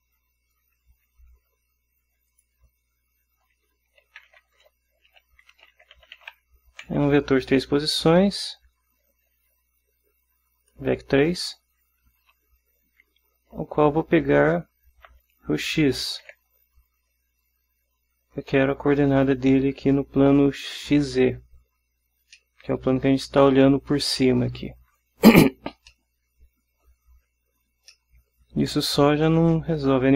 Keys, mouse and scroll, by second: 2.4 click, 4.2-7.0 typing, 8.4 shift+x, 9.5 ctrl+alt+Left, 12.4 ctrl+alt+Right, 15.2 ., 16.4 x, 22.5-24.0 middle drag, 26.0-27.1 middle drag, 28.0-29.2 middle drag.